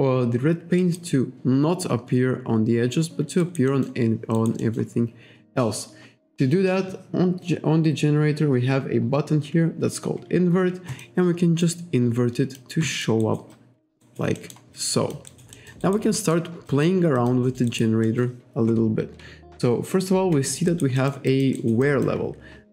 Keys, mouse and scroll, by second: 0.8 alt+right click, 3.4 alt+right click, 3.7 alt+middle click, 4.4 alt+right click, 10.9 click, 11.6 alt+click, 12.9 alt+middle click, 13.2 alt+right click, 14.4 alt+middle click, 14.8 alt+click, 15.6 alt+middle click, 16.2 alt+middle click, 16.7 alt+click, 17.2 alt+click, 17.7 alt+right click, 18.1 alt+middle click, 19.5-20.0 scroll down 1, 20.7 alt+right click, 21.0 alt+middle click, 21.3 alt+click, 21.9 alt+click.